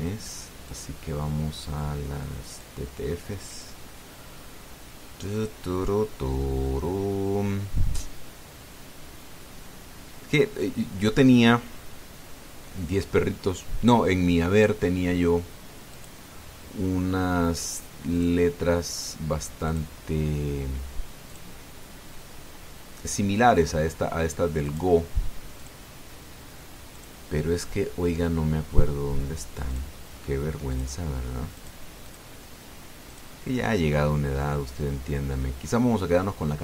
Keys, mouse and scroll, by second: 1.5 click, 3.3 click, 5.5-7.2 scroll down 3, 7.7-8.5 scroll down 2, 9.4-12.0 scroll down 7, 12.4-12.9 scroll down 2, 13.3-13.7 scroll down 2, 16.7 click, 18.9 click, 20.4 click, 22.1 click, 25.5 click, 26.3 click, 27.7 click, 30.5 click, 31.5 click, 32.4 click, 32.8 click, 33.9 click.